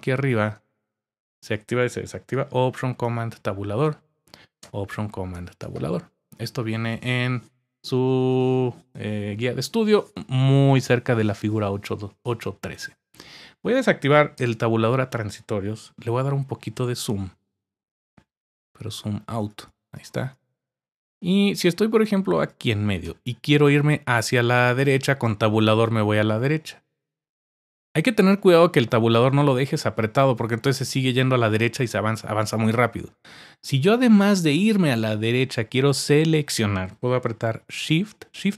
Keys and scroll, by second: 3.0 alt+super+Tab, 5.3 alt+super+Tab, 14.4 alt+super+Tab.